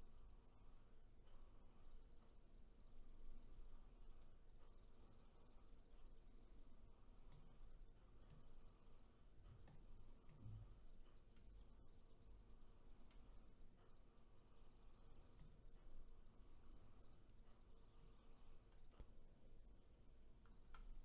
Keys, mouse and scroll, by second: 8.4-10.3 right drag, 10.3-13.3 drag.